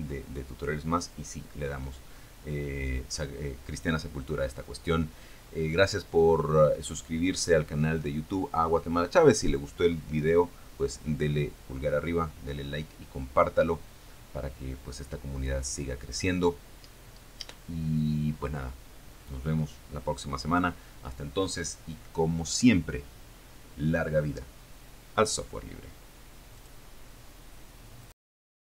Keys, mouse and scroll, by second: 24.7 click, 26.2 click, 27.0 click, 28.6 click.